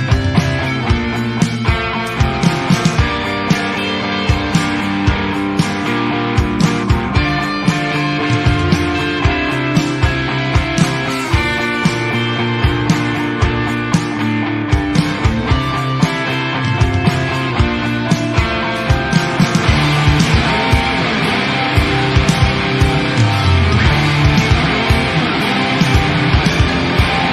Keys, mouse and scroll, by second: 0.1 click, 0.9-1.9 middle drag, 1.9 click, 2.1-2.9 middle drag, 2.9 click, 3.3-5.6 middle drag, 5.6 scroll up 1, 5.7 alt+a, 6.1 click, 6.4 middle click, 7.0 click, 8.0-8.5 middle drag, 8.5 alt+a, 8.6 click, 9.0 shift+d, 9.6 click, 9.9 middle drag, 10.2 click, 10.8-13.0 middle drag, 13.0 r, 14.8 click, 16.5 r, 17.5 alt+a, 17.6-18.3 middle drag, 18.3 scroll up 1, 18.4-19.2 middle drag, 19.2 shift+d, 19.6 click, 19.8 shift+d, 20.2 click, 21.2 r, 22.1 click, 24.3 alt+a, 24.4-24.8 scroll down 1, 24.8 click, 25.3 shift+click, 25.6 shift+click, 26.3 ctrl+j, 26.4-26.9 middle drag, 26.9 g.